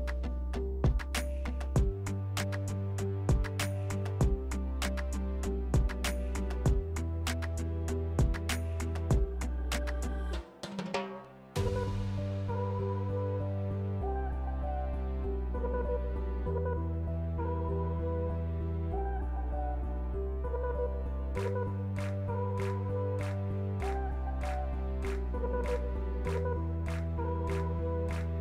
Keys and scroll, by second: 4.0 ctrl+z.